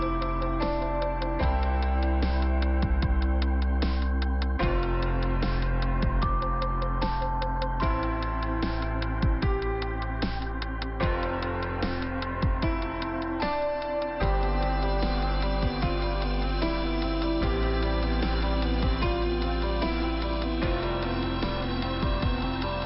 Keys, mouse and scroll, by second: 4.7 ;, 5.8 click, 5.9 click, 6.9 scroll up 1, 7.5 click, 7.7 click, 7.9 click, 11.1 middle click, 15.3-16.0 scroll up 2, 18.4 f, 20.5 middle click, 21.5 click.